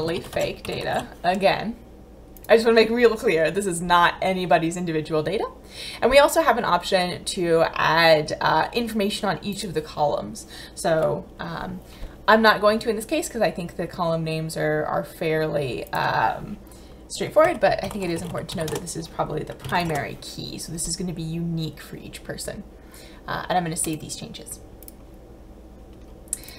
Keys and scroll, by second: 0.0-0.8 typing, 17.5-19.9 typing.